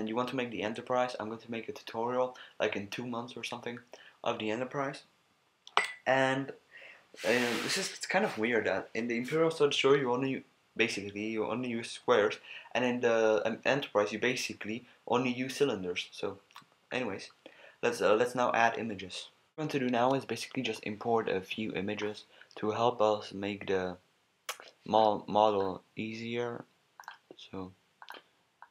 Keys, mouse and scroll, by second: 20.8-28.7 middle drag.